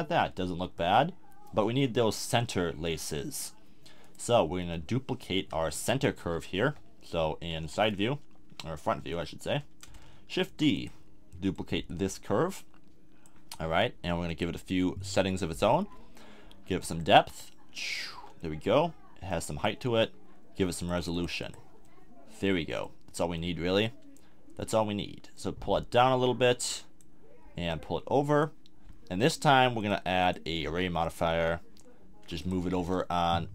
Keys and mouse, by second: 1.2-1.6 middle drag, 4.5-6.2 middle drag, 6.2 KP_1, 6.6 KP_3, 7.6 KP_1, 9.1 z, 10.5 shift+d, 18.1 z, 18.5 click, 18.7 middle click, 21.8-22.6 middle drag, 22.6-23.4 drag, 23.4-23.8 middle drag, 32.8 1.